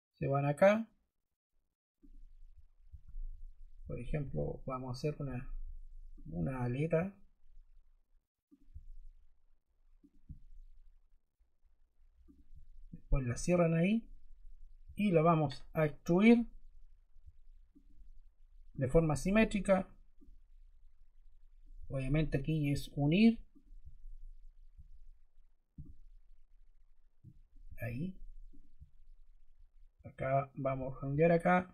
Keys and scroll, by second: 14.8 e.